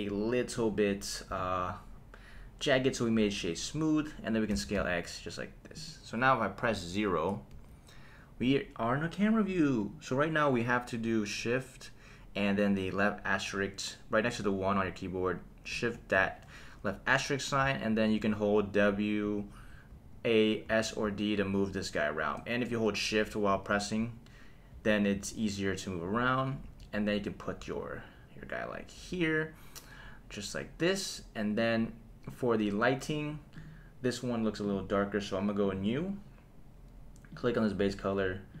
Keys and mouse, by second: 0.5 right click, 3.5 click, 4.5 s, 4.8 x, 5.8 click, 7.5 KP_0, 9.8 click, 15.9 shift+`, 17.6 a, 17.6 s, 19.2-22.1 typing, 23.1-25.1 typing, 26.6 a, 27.6 d, 29.0 a, 30.8 click, 33.5 click, 34.6 click, 35.6 click, 37.3 click.